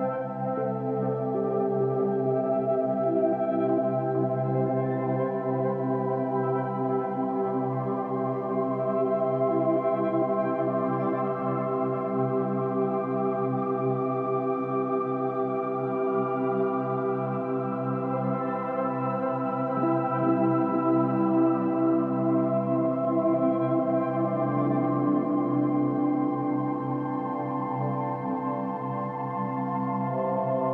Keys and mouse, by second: 0.2 typing, 0.3 click, 1.5 space, 1.7 space, 2.2-7.0 drag, 7.2 space, 8.3-8.8 typing, 11.0-12.4 ctrl+alt+drag, 12.9-13.2 alt+shift+drag, 13.5 ctrl+alt+drag, 14.6-15.6 drag, 17.9-20.2 drag, 21.1 g, 21.9 3, 22.2-24.1 drag, 23.5 space, 24.8 space, 25.2 click, 25.5 space, 26.6 space, 26.9 click, 27.3 space, 29.0 space, 30.5-30.7 drag.